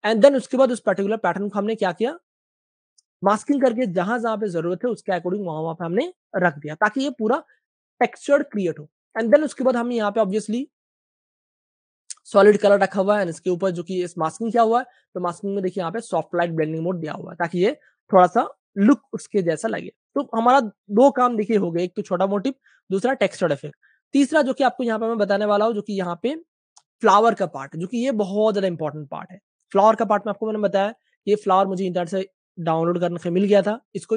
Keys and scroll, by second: 1.7 alt+super+z, 2.3 alt+super+z, 5.2-6.4 typing, 12.0-14.7 typing, 17.2-18.0 typing, 19.6 typing, 20.8 super+space, 20.9 super+space, 22.1 space, 23.8 space, 27.2 space, 28.8 super+space, 28.9 super+space, 29.4-31.0 typing, 31.4 super+space.